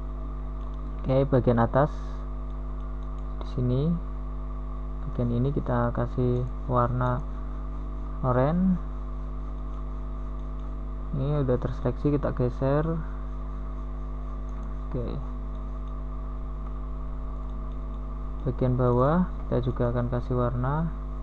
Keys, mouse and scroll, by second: 4.3 s, 10.6 a, 11.3 Tab, 13.3 KP_1, 14.9 Tab, 16.9 z, 17.5 z.